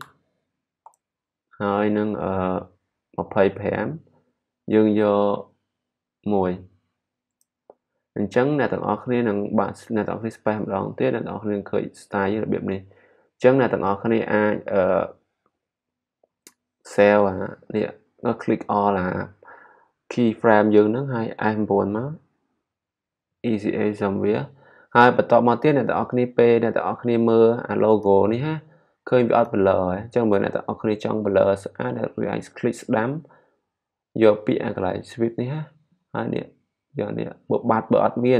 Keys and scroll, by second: 0.0-0.4 typing, 6.3 1.